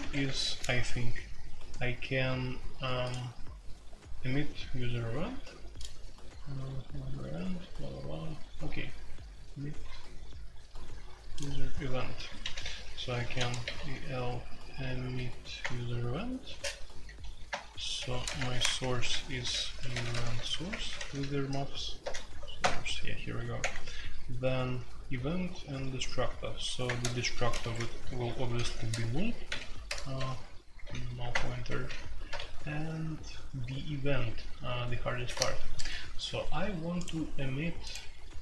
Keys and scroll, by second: 0.0-0.2 typing, 12.4-15.1 typing, 15.6 Return, 16.4 space, 17.5 Return, 17.9 Escape, 18.0-23.6 typing, 18.3 Return, 26.8 Return, 27.1-30.8 typing, 31.3 Return, 31.6 Escape, 31.8 k, 32.3 super+k.